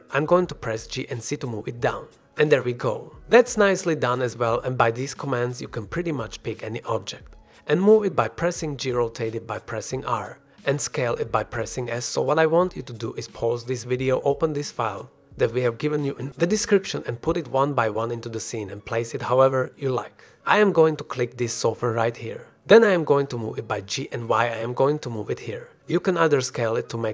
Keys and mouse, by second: 1.2 shift+click, 1.7-2.0 ctrl+drag, 2.1 ctrl+s, 2.3 drag, 2.5-3.5 middle drag, 3.6 shift+drag, 4.1-4.4 drag, 4.6 ctrl+s, 6.2 g, 6.2 x, 6.2 shift+drag, 6.6 g, 8.3 g, 9.7 r, 11.2 click, 11.8 s, 13.9 drag, 14.3 shift+click, 14.9 shift+drag, 17.6 drag, 18.0 shift+drag, 21.5 click, 22.0 shift+click, 23.5 g, 23.9 y, 25.7 shift+click, 26.7-27.1 typing.